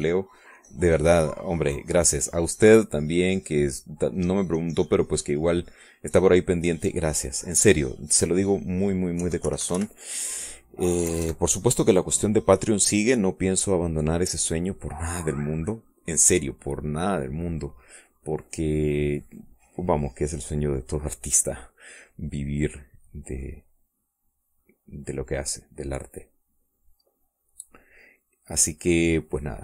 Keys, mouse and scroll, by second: 1.3-3.1 shift+drag, 6.5 click, 7.5-9.2 drag, 10.0 KP_5, 10.3 KP_Subtract, 11.1 click, 11.9 KP_Add, 12.4-13.5 drag, 13.6 middle click, 18.8 middle click, 22.8 middle click, 24.2-28.5 drag, 28.8-29.6 drag.